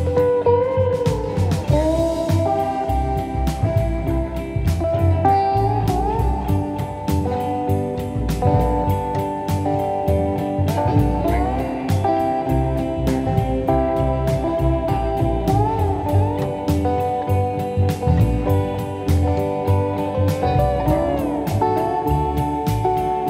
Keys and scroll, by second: 1.3 F1, 2.2 ctrl+d, 2.3 Escape, 8.4 ctrl+z, 15.9 p, 16.8 4, 21.5 1, 22.2 ctrl+d, 22.3 Escape, 22.8 F1, 22.9 F2.